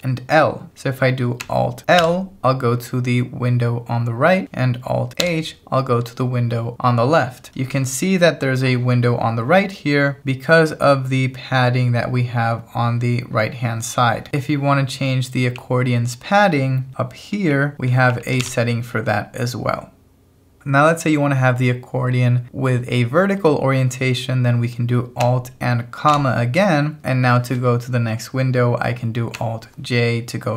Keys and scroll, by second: 2.0 alt+l, 5.3 alt+h, 15.6-18.9 typing, 26.1 alt+,.